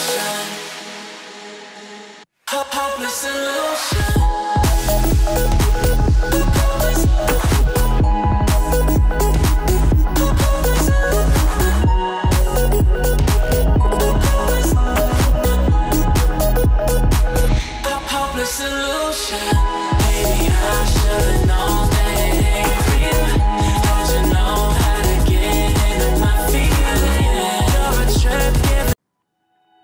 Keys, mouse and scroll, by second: 1.8 alt+scroll down 1, 2.3 click, 2.7 alt+scroll up 1, 4.0 F7, 4.8-8.1 drag, 8.7 alt+scroll down 1, 9.3 alt+scroll up 1, 9.7-10.1 click, 10.2-10.5 alt+scroll down 1, 11.3 click, 14.1 alt+Num_Lock, 14.1 click, 14.2 alt+scroll up 1, 16.0 click, 19.5 Delete, 20.4-20.8 alt+scroll down 1, 21.3-22.4 drag, 24.4 Delete, 25.6 click, 26.6 right click, 27.2-28.9 drag, 29.5 Delete.